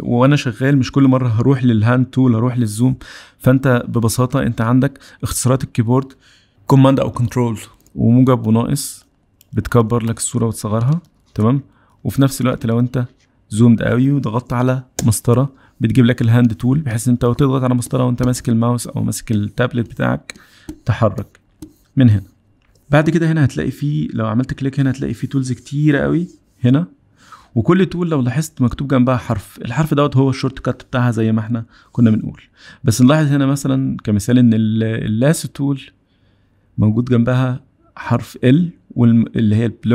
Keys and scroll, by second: 7.8 super+=, 8.6 super+-, 9.4 super+=, 10.4 super+-, 11.2 super+=, 12.2 super+-, 15.2 space.